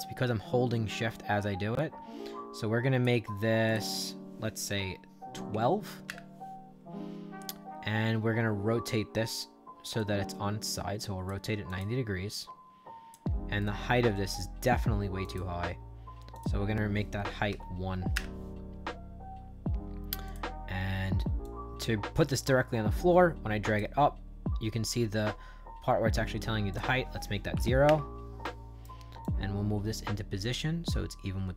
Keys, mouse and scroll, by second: 3.6 shift+click, 4.7 1, 5.4 2, 6.0 Return, 9.9-11.2 shift+drag, 11.6 click, 12.2 click, 13.5 right click, 15.1 click, 16.2 click, 17.4 1, 18.0 Return, 20.2 click, 21.3-23.7 drag, 26.6 click, 27.5 0, 27.8 Return, 28.3 right click, 29.1-31.5 drag.